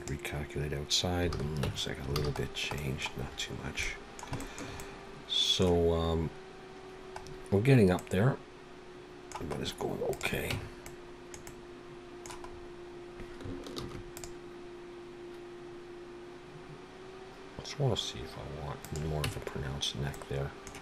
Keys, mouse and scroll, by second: 1.4 alt+a, 1.7 Tab, 2.2 alt+a, 2.3-2.8 scroll down 2, 2.8 middle click, 3.3-3.8 scroll up 1, 3.8 middle click, 3.8 scroll up 2, 4.4 shift+middle click, 4.8 middle click, 7.2-7.6 scroll up 3, 8.0 middle click, 9.6-10.0 scroll up 2, 10.1 click, 10.5 Tab, 10.9 middle click, 11.5 middle click, 12.5 scroll up 2, 13.8 ctrl+r, 19.3 Tab, 19.6-20.2 scroll down 3, 20.2 middle click.